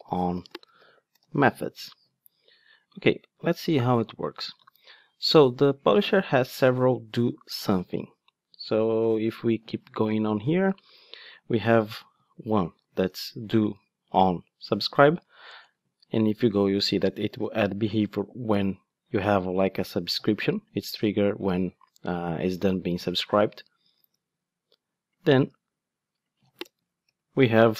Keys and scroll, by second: 15.5 Return, 17.2 super+b, 25.5 ctrl+Tab.